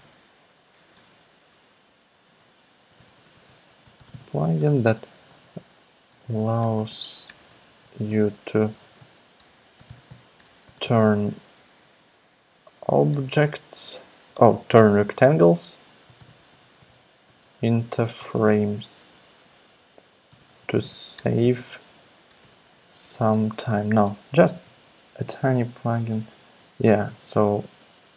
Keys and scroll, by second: 0.0-0.5 typing, 1.0 super+BackSpace, 2.1-23.5 typing, 14.3 alt+BackSpace, 23.6 alt+BackSpace, 24.6 ., 24.8 space, 26.0 Return, 26.1 Return.